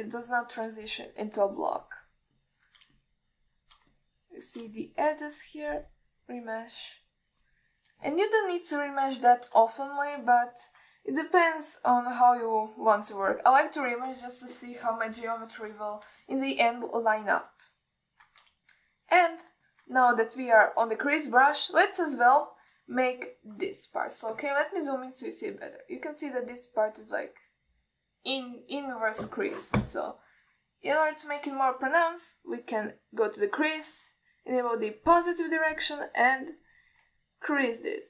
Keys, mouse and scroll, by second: 0.4 click, 0.9 middle click, 1.5 click, 2.5-3.3 drag, 3.6 middle click, 4.2 shift+click, 5.2 middle click, 6.0 shift+click, 7.9 click, 8.1-9.1 drag, 9.3 ctrl+middle click, 9.7 alt+middle click, 10.2 ctrl+middle click, 11.1 alt+shift+middle click, 11.8 ctrl+alt+middle click, 12.7 KP_1, 13.7 ctrl+middle click, 14.6 ctrl+alt+middle click, 16.1 ctrl+alt+middle click, 17.5 alt+shift+middle click, 19.0 ctrl+alt+middle click, 20.0 alt+shift+middle click, 20.9 ctrl+middle click, 21.4 middle click, 23.0 click, 36.2 click, 37.1 click.